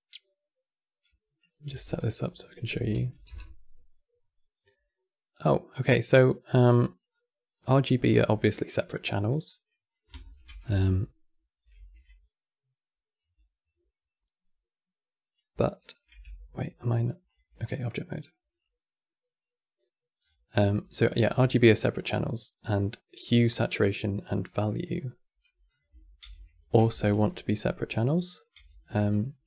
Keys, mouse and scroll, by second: 1.4 v, 5.6 click, 6.8 click, 7.5 click, 8.1-9.1 middle drag, 9.1 click, 9.9 ctrl+shift+click, 10.3 click, 11.3 ctrl+h, 15.9 Tab, 20.9-21.4 scroll down 5, 22.0 click, 25.4 click, 25.9 ctrl+h, 27.0 ctrl+shift+Left, 28.3 ctrl+h.